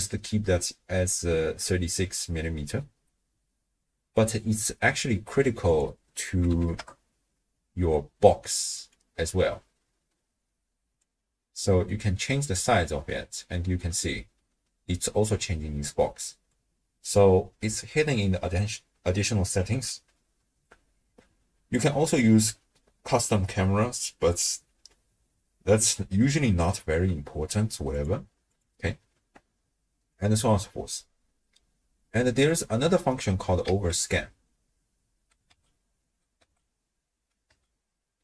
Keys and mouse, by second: 5.7-6.8 drag, 8.9-11.0 drag, 12.0-16.5 drag, 17.0 click, 27.9 click, 28.5 click, 33.7 w, 35.5 w, 36.4 w, 37.5 w.